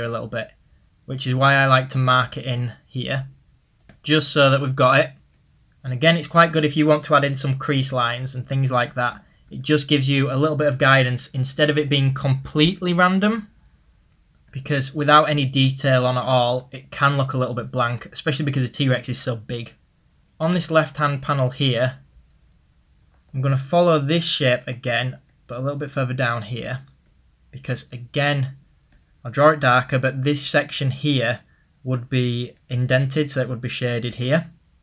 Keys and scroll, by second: 3.5 typing, 4.8-5.5 typing, 12.0 typing, 13.9-14.7 typing, 22.7 ctrl+z.